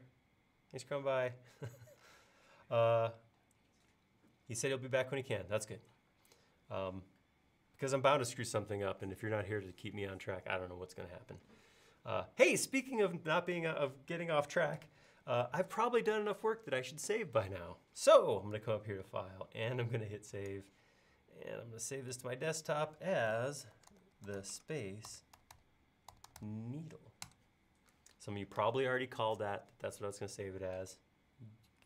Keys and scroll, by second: 23.5-25.4 typing.